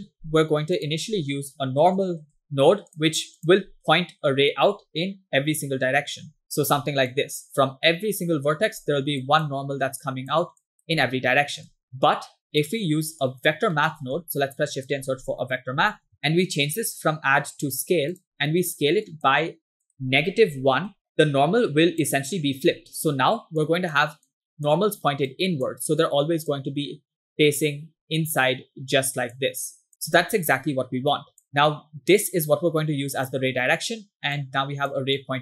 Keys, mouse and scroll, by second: 0.2 shift+a, 6.4 click, 6.4 w, 6.4 e, 7.2 click, 8.3 click, 9.2 click, 10.0 click, 10.7 click, 11.7 ctrl+click, 13.3 click, 13.8 middle click, 14.0 shift+a, 17.0-18.4 drag, 19.1 click, 19.9 click, 21.2 click, 23.7 click, 24.3 click, 25.3 click, 26.2 click, 29.0 click, 29.6 click, 30.5 ctrl+click, 32.3-33.4 drag, 33.9-34.3 scroll down 2, 34.4 click, 35.3 click.